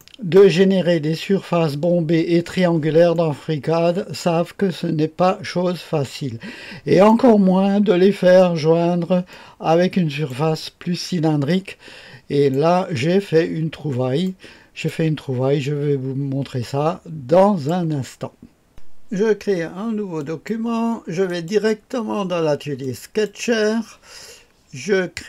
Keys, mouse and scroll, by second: 0.0 middle click, 0.4 right click, 3.1-7.1 drag, 9.3-10.3 drag, 11.5-13.0 drag, 13.7-14.3 scroll up 1, 14.3-15.4 right drag, 15.4-16.7 scroll down 1, 16.7-17.7 drag, 18.7 click, 20.2 click, 21.3 click, 22.8 click.